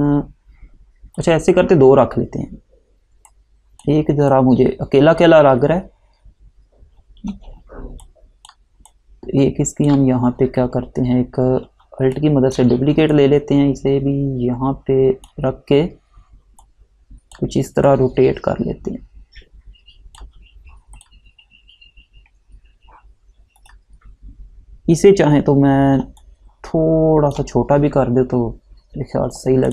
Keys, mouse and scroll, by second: 8.1 click, 12.3 click, 13.2 click, 23.7 click, 26.3 click, 29.3 Right.